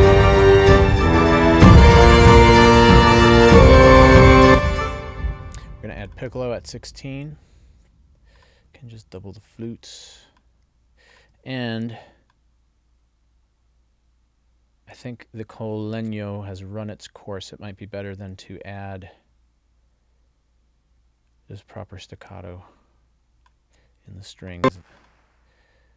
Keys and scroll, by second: 4.5 space.